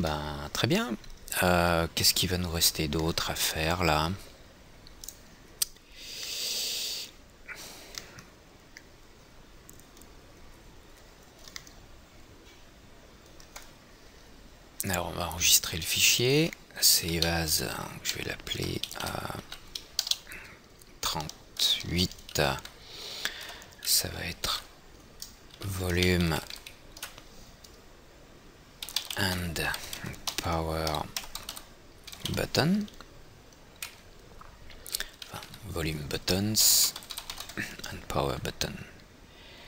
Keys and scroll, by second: 17.7 Right, 17.8 Left, 20.0 Right, 20.8 Return, 23.2 Right, 34.8 Left, 35.8 Right.